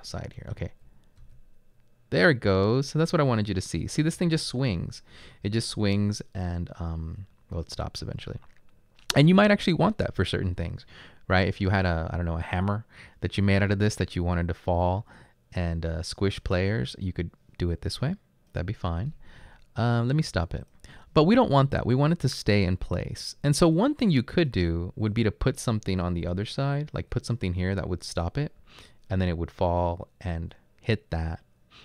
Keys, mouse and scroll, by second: 0.0-1.2 typing, 2.5-4.7 typing, 26.3-27.0 typing.